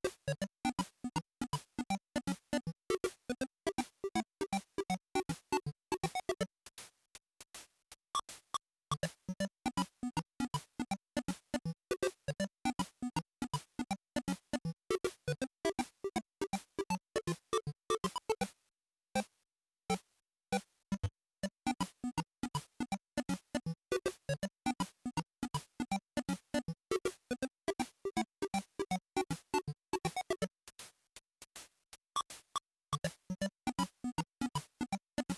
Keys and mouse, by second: 10.4-11.4 drag, 15.4 click, 16.9-20.3 drag, 22.4 click, 26.6-30.1 drag, 31.6-33.9 drag.